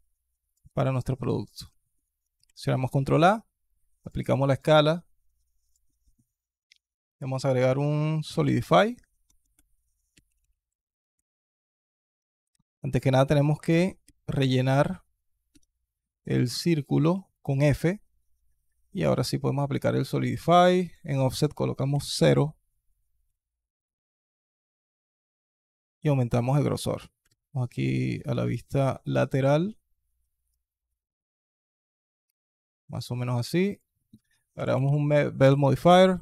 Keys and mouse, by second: 0.5-1.3 alt+drag, 1.5-1.9 alt+drag, 2.2 ctrl+a, 4.2 alt+click, 5.5-11.0 drag, 9.1 BackSpace, 9.2 BackSpace, 12.0 Tab, 12.4 alt+click, 13.9 f, 15.3 Tab, 15.9-16.3 alt+drag, 17.0 alt+click, 18.9 alt+click, 20.7-22.0 drag, 23.4-25.3 shift+drag, 25.7 alt+click, 27.0 alt+KP_2, 27.0 alt+KP_3, 28.3 alt+click, 30.4-32.2 shift+drag, 32.2 shift+middle click, 32.5 alt+drag, 33.6-35.7 drag.